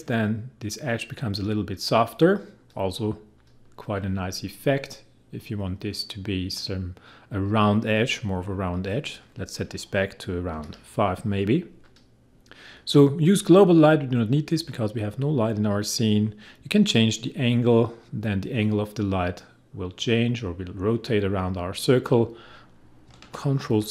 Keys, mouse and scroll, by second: 8.9 click, 10.5 5, 11.8 click, 17.0-23.6 drag, 23.6 ctrl+z.